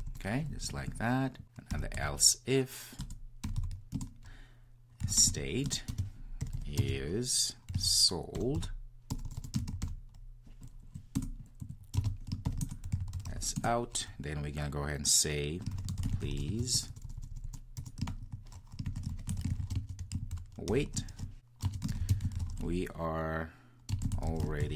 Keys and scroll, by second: 3.0 Return, 11.2 Return, 15.8 Return.